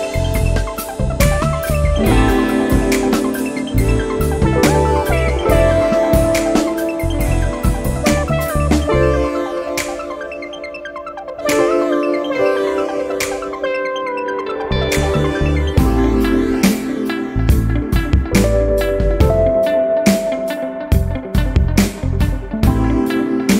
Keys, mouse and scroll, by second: 3.1 click, 5.9 click, 6.8 click, 8.7 click, 10.7 click, 20.6 click.